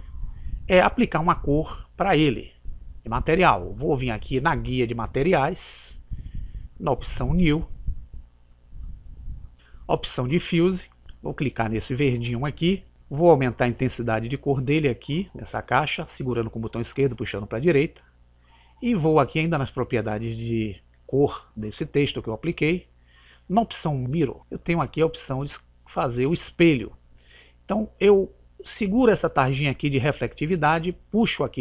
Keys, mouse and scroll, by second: 0.3 scroll down 1, 4.9 click, 8.4 click, 11.0 click, 15.8 click, 19.6 click, 24.4 click, 29.5 click.